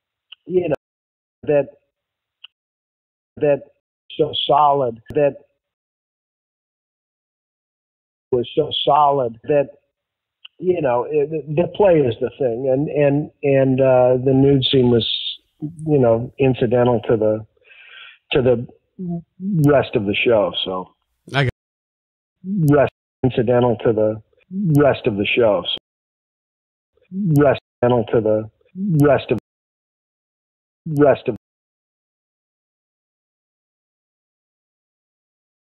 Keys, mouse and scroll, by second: 0.6 space, 1.2 click, 1.3 space, 1.7 click, 2.4 space, 3.1 ctrl+shift+Delete, 3.3 space, 3.7 space, 3.9 click, 3.9 space, 5.6 space, 5.7 click, 7.1 click, 8.1 click, 8.2 space, 10.0 ctrl+s, 11.7-13.1 drag, 13.5 click, 14.5 click, 15.7-17.0 drag, 17.7 click, 18.4 click, 19.8-21.4 drag, 22.0 ctrl+shift+Delete, 22.3 space, 22.8 space, 23.1 click, 23.1 space, 25.2 click, 25.7 space, 26.1 click, 26.8 click, 26.8 space, 27.5 space, 27.6 click, 27.7 space, 29.3 space, 29.8 click, 30.0 click, 30.8 space, 31.3 space, 33.3 click, 35.1-35.6 shift+drag.